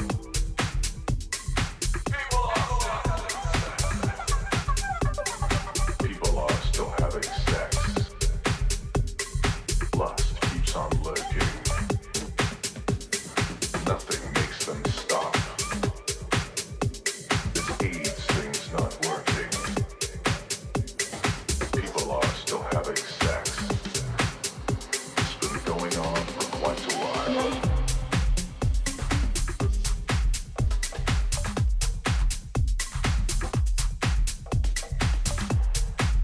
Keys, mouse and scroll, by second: 0.5-4.1 middle drag, 4.4-6.1 drag, 11.2 ctrl+z, 11.8-14.2 middle drag, 14.7-17.4 middle drag, 18.4 a, 19.7 Tab, 20.1 middle click, 22.9-25.1 middle drag, 25.2-28.2 middle drag, 26.5 t, 28.2-30.2 drag, 31.0 click, 31.7-33.6 middle drag.